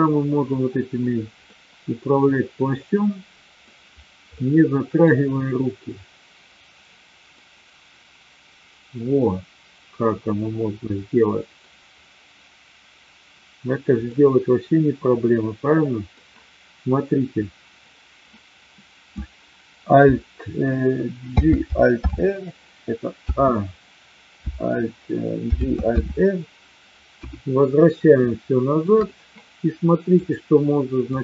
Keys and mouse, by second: 1.4-3.6 middle drag, 4.4-4.9 middle drag, 7.3-11.6 middle drag, 14.2-16.0 middle drag, 21.2 alt+j, 21.9 alt+r, 23.3 a, 25.4 alt+g, 25.9 alt+r, 27.0 KP_1, 28.2-28.8 shift+middle drag, 30.2-31.2 drag.